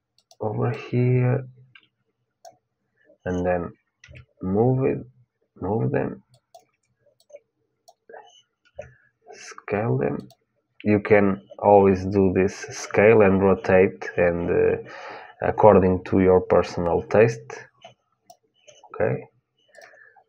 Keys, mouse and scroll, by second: 0.5-2.4 drag, 3.8 g, 6.9-8.9 drag, 8.4 s, 17.0-19.1 drag, 19.5-20.2 drag.